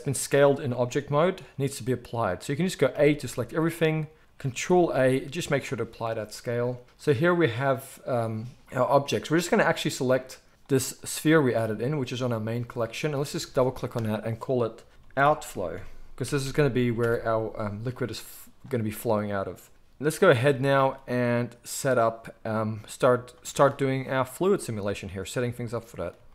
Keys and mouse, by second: 0.3 click, 0.3-6.8 middle drag, 0.9 g, 3.0 a, 4.8 ctrl+a, 6.8 click, 7.0 middle click, 7.8 click, 7.9-13.0 middle drag, 13.0 click, 13.0 middle click, 13.1-26.3 drag.